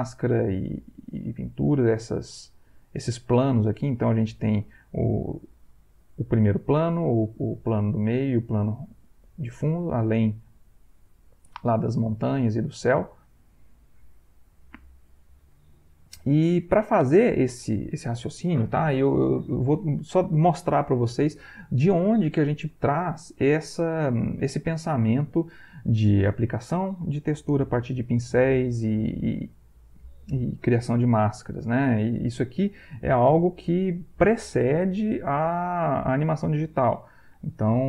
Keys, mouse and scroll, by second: 0.0 click, 1.0 click, 1.5 click, 2.0 click, 2.4 click, 5.2 click, 5.7 click, 7.0 click, 7.4 click, 8.5 click, 9.0 click, 10.6 click, 11.8 click, 12.2 click, 13.5-15.6 drag, 16.0 click, 16.6-18.1 ctrl+drag, 37.6 alt+Tab.